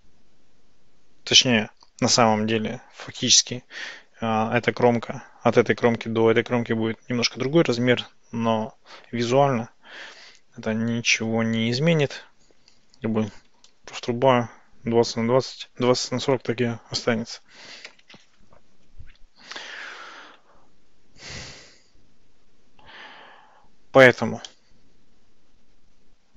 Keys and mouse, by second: 13.7 Tab, 23.6 Tab, 24.5-26.3 middle drag.